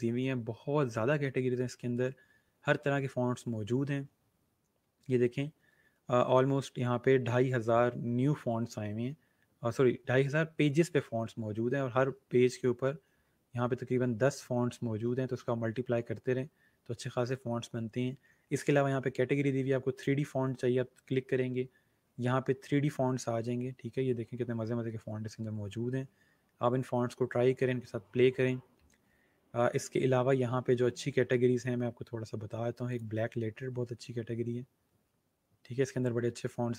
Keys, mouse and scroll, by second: 3.5 scroll down 1, 4.9 scroll up 1, 11.8 scroll down 1, 13.5 scroll up 1, 16.6 scroll up 1, 19.8 click, 21.4 click, 21.7 scroll down 1, 28.1 scroll up 1, 32.8 click, 35.0 scroll down 1.